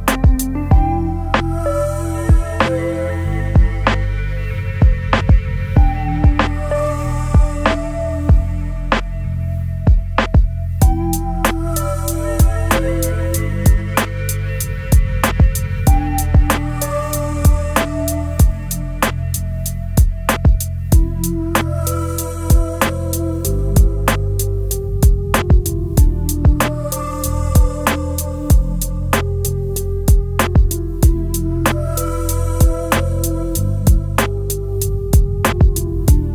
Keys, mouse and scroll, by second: 10.5 ctrl+z, 12.5 shift+click, 19.5-20.1 alt+scroll up 2, 34.8 typing, 35.5 Return.